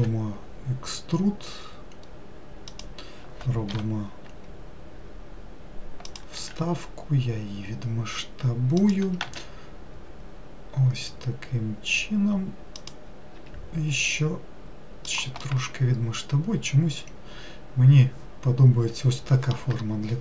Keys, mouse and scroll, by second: 0.0 e, 6.4 s, 13.4 s, 15.5-18.6 middle drag.